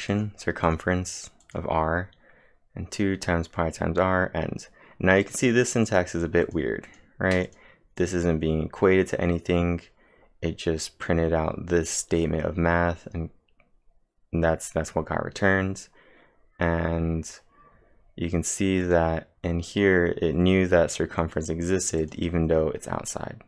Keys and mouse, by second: 0.1 click, 0.7 click, 1.4 click, 1.5-2.2 typing, 5.2 click, 6.0-6.8 typing, 6.9 click, 8.0 click, 18.8 click, 22.0 click.